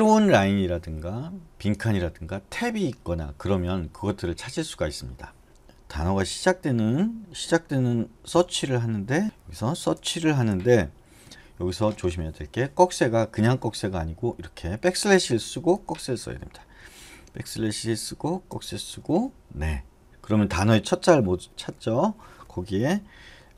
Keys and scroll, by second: 8.3-11.3 typing, 9.2 Escape, 16.0 \, 18.7 <.